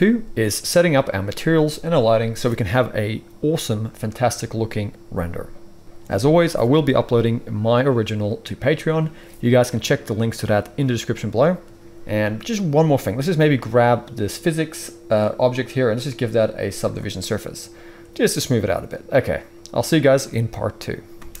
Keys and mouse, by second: 11.8-13.0 middle drag, 13.0-15.2 right drag, 15.2 middle click, 15.4-16.0 right drag, 16.0-21.4 middle drag, 21.2 space.